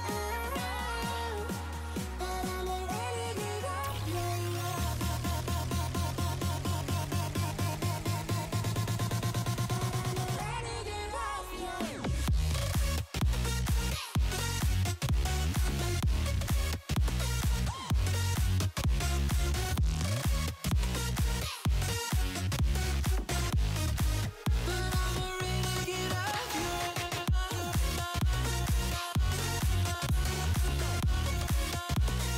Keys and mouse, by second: 1.7 click, 5.3 click, 8.0 click, 10.6 space, 11.6 click, 14.0 alt+click, 14.5 click, 16.0 alt+click, 17.4 alt+click, 18.1 click, 20.7 alt+click, 22.1 click, 23.3 click, 23.9 click, 25.8 click, 27.2 click, 27.9 click, 29.1 space, 30.6 click, 32.2 click.